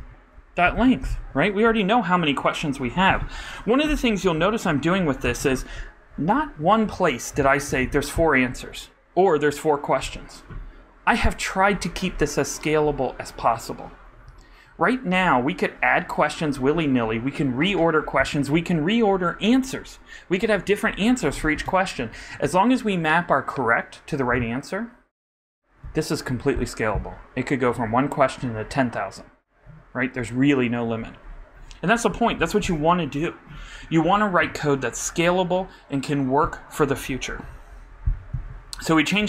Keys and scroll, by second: 4.3 super+Right, 5.2 super+Left.